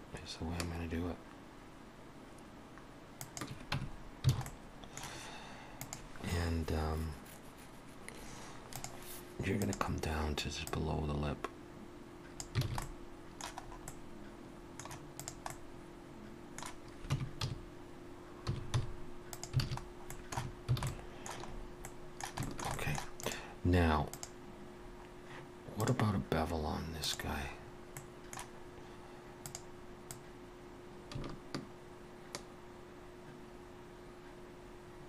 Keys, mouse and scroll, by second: 3.8 Tab, 3.9-4.3 scroll down 2, 4.3 alt+a, 4.5 middle click, 9.7 click, 12.6 click, 12.7 alt+a, 12.8 middle click, 13.6-14.1 scroll up 2, 13.9 middle click, 15.2 click, 15.5 middle click, 17.1 Tab, 17.5 a, 18.5 s, 19.7 alt+a, 19.8-20.4 scroll down 2, 20.1 middle click, 20.4 Tab, 20.8 alt+a, 20.9 middle click, 21.5 scroll up 2, 21.9 middle click, 22.4 shift+middle click, 22.8 middle click, 23.2 click, 24.9 click, 24.9 scroll down 1, 25.8 scroll down 1, 27.6-27.9 scroll up 2, 28.0 middle click, 29.5 click, 30.7 click.